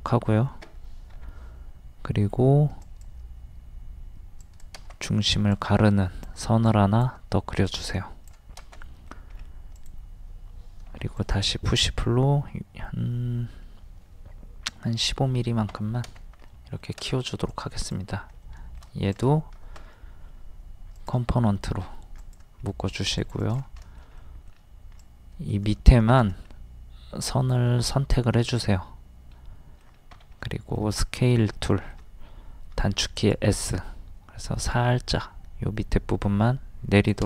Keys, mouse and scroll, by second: 2.8-6.7 drag, 5.4 e, 8.8 middle click, 9.4-9.8 scroll up 1, 9.8 click, 10.9 d, 11.2 click, 14.8 KP_1, 14.9 KP_5, 16.5 middle click, 17.5 click, 18.5 middle click, 19.2 right click, 21.0 click, 22.7 middle click, 23.2 click, 23.9 shift+middle click, 25.0 click, 26.5-30.1 middle drag, 30.1 s, 30.4-32.7 middle drag, 33.2 click.